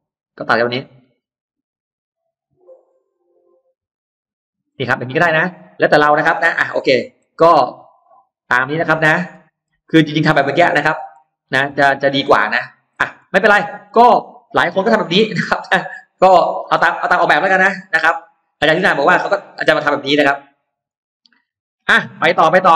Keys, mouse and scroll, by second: 0.4 click, 0.8 click, 1.9 click, 2.7 click, 3.4 click, 4.1 click, 4.5-5.4 scroll down 2, 5.6 middle click, 6.8 ctrl+z, 7.1 ctrl+z, 7.8 middle click, 8.2-8.6 scroll down 1, 8.8 middle click, 9.0-9.4 scroll down 1, 9.6-10.3 scroll up 2, 10.8 scroll down 1, 11.0 middle click, 11.4-11.7 scroll down 1, 12.7-13.0 scroll down 1, 13.0 middle click, 13.3-13.6 scroll down 1, 13.8 middle click, 14.0-14.3 scroll down 1, 14.3-15.4 scroll up 3, 15.7-16.2 scroll down 2, 16.2 middle click, 16.6-16.9 scroll up 2, 17.4-17.8 scroll down 2, 18.2-18.6 scroll down 2, 19.7 scroll up 2, 20.4 e, 20.7-21.7 drag, 22.3 middle click.